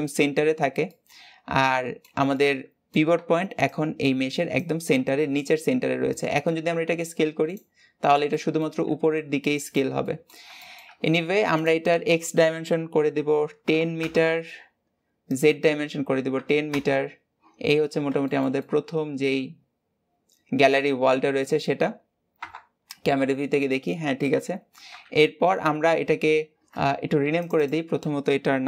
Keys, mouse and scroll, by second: 0.3-0.8 scroll up 1, 0.8-6.2 middle drag, 6.2-6.6 scroll down 2, 6.6 s, 7.6-8.0 scroll down 4, 8.0 scroll up 2, 8.2 middle click, 8.7 s, 10.0-13.8 middle drag, 13.8-17.3 drag, 17.3 scroll down 5, 18.2-22.2 shift+middle drag, 22.2 KP_0, 24.8 KP_7, 27.4-28.6 drag.